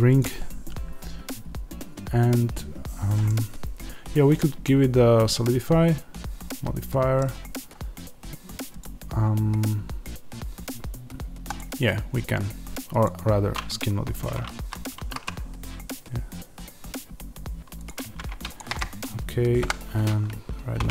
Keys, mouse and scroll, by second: 0.2 click, 3.3-13.0 middle drag, 13.0-17.9 drag, 14.0 Tab, 14.5 a, 17.9 Tab, 18.5 shift+click, 18.7-20.9 middle drag, 19.5 KP_1, 20.7 g.